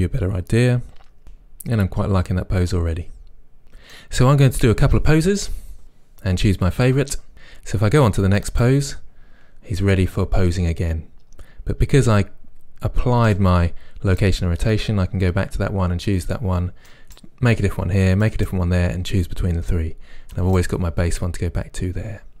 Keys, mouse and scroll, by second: 8.5 right click, 13.4-16.1 right drag, 17.0-22.4 right drag.